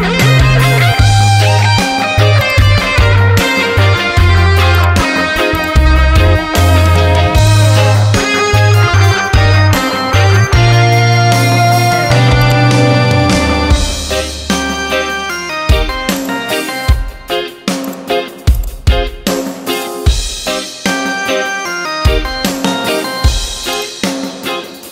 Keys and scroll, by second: 8.5 Return.